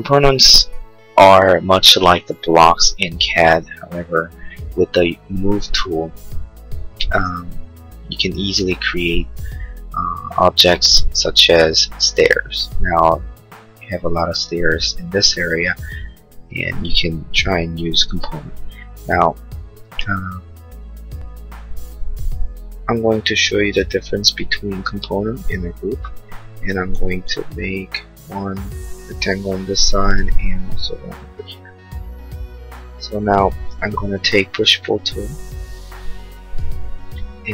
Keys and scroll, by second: 27.0 r.